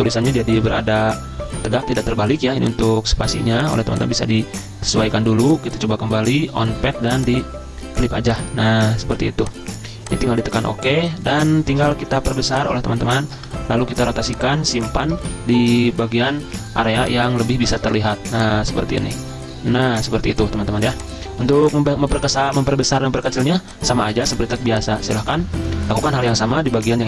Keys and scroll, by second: 15.2 ctrl+z, 15.2 ctrl+a, 16.5 ctrl+shift+z, 21.5 z, 23.5 z, 24.2 z, 25.4 v.